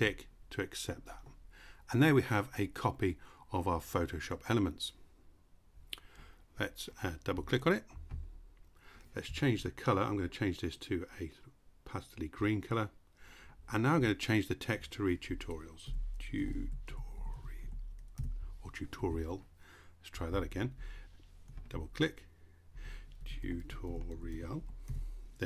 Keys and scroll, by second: 15.4-17.7 typing, 22.5-24.9 typing.